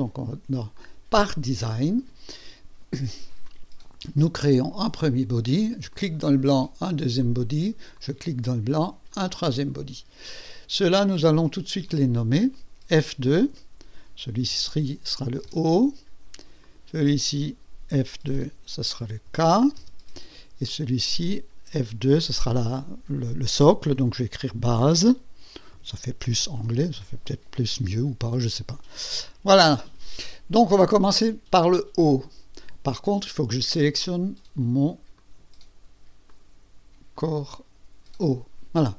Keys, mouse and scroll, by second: 0.7 click, 2.9 click, 3.5 click, 4.4 click, 5.9 click, 6.2 click, 7.2 click, 7.9 click, 9.1 click, 10.3 click, 11.9 click, 13.4 F2, 14.4 o, 15.5 Return, 15.6 Return, 16.6 click, 18.4 F2, 19.2 k, 19.8 Return, 20.7 click, 22.3 F2, 25.0-26.6 typing, 28.2 Return, 29.2 click, 35.2 click, 36.3 right click, 37.1 click.